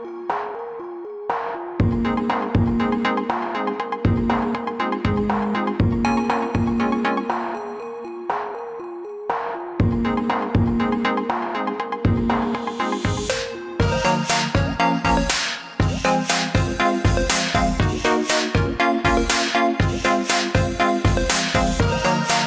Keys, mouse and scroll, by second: 0.7-3.0 alt+scroll up 2, 3.3 click, 7.8 shift+click, 9.2 click, 11.8 click, 12.3 alt+click, 12.8 alt+click.